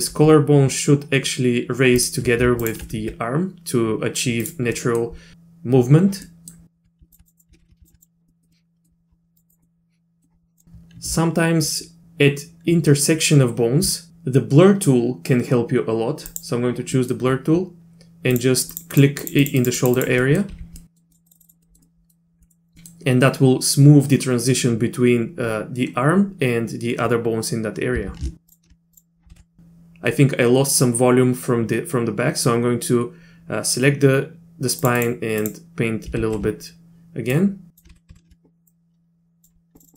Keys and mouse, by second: 0.1 r, 2.6 ctrl+click, 3.0 r, 4.7 middle click, 6.3 middle click, 7.2 click, 7.5 ctrl+z, 7.6 ctrl+z, 8.0 click, 8.5 click, 9.5 click, 9.6 middle click, 10.6 click, 17.0 middle click, 18.3 click, 18.7 click, 18.9 click, 19.2 click, 19.4 click, 19.6 click, 19.8 click, 20.0 click, 20.2 middle click, 20.5 z, 20.8 middle click, 21.1 click, 21.3 click, 21.4 click, 21.4 click, 21.6 middle click, 21.8 middle click, 22.4 middle click, 22.8 middle click, 28.0 z, 28.9 click, 29.3 ctrl+z, 34.8 click, 35.0 click, 35.4 click, 36.2 ctrl+z, 37.4 click, 37.9 ctrl+z, 38.1 ctrl+z, 38.7 click, 39.8 click, 39.8 click, 39.9 click.